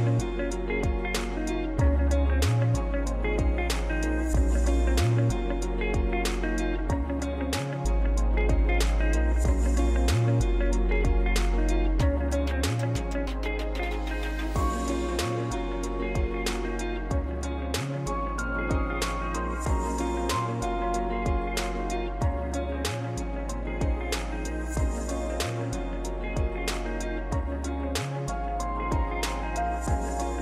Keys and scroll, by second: 12.5 ctrl+c, 13.1 ctrl+v.